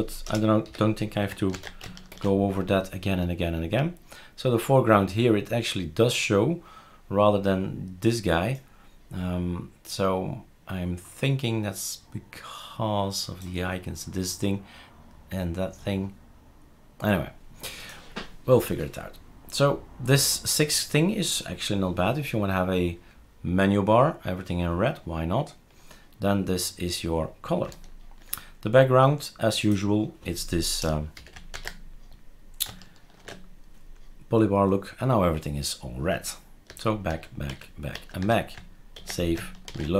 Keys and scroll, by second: 0.2 BackSpace, 0.6 6, 1.5 ctrl+s, 2.1 shift+super+r, 30.8-31.1 BackSpace, 31.5 ctrl+s, 33.3 shift+super+r, 36.7 ctrl+z, 37.1 ctrl+z, 37.5 ctrl+z, 38.0 ctrl+z, 39.0 ctrl+s.